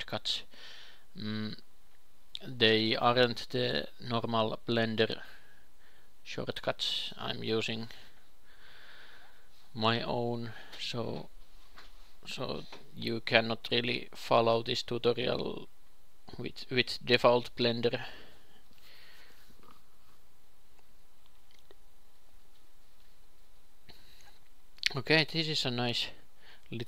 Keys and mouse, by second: 0.0-3.2 drag, 0.3 Tab, 3.2 Tab, 3.7 KP_3, 4.5 KP_6, 5.6-7.1 drag, 6.3 KP_2, 7.2 shift+s, 8.1 click, 10.3 shift+a, 12.8 s, 13.7 g, 14.5 ctrl+r, 16.6 ctrl+r, 19.1 a, 19.5 q, 19.9 g, 22.2 ctrl+r, 24.5 Tab, 25.6 ctrl+shift+KP_2, 25.8 ctrl+shift+KP_3, 26.4 Tab.